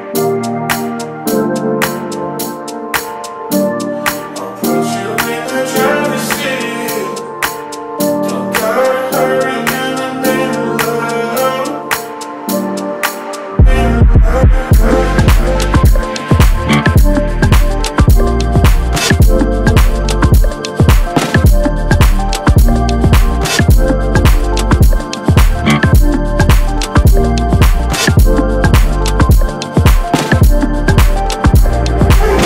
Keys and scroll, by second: 0.1 space, 0.4 r, 2.9 alt+Left, 4.5 3, 4.6 4, 4.7 5, 4.8 Return, 8.6 shift+Up, 9.8 shift+Down, 10.4 alt+Tab, 11.8 ctrl+c, 12.1 Tab, 12.7 ctrl+v, 18.5 space, 20.0 o, 25.8 space.